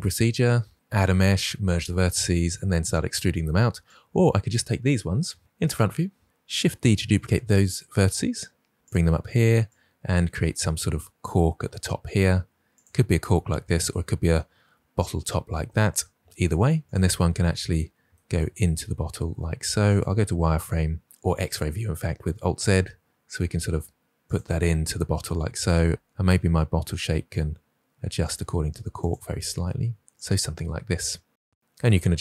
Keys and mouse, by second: 5.3 KP_1, 6.6 shift+d, 8.7 click, 10.2 g, 12.6 click, 16.8 g, 18.5 g, 19.8 click, 20.1 alt+z, 23.2 g, 25.2 click, 25.3 g, 25.7 click, 26.1 g, 28.1 click, 28.9 click, 29.1 g, 30.9 click.